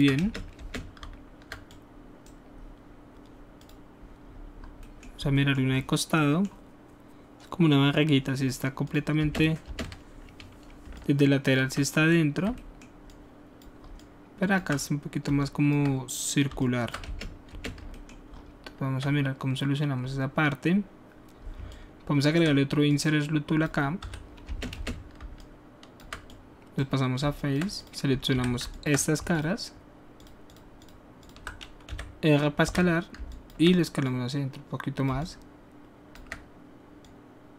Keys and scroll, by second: 0.2 alt+space, 9.2 space, 9.6 space, 17.0 alt+space, 24.0 w, 24.4 space, 28.3 q, 29.1 alt+shift+q, 31.8 alt+shift+e, 32.6 r, 33.1 alt+r.